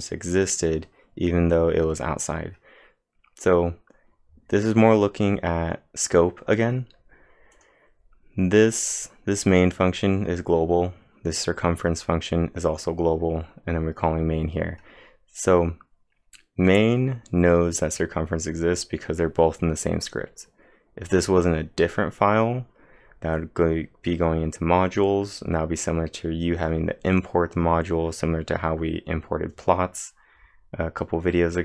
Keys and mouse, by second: 0.3 click, 7.3-8.0 typing, 7.5 click.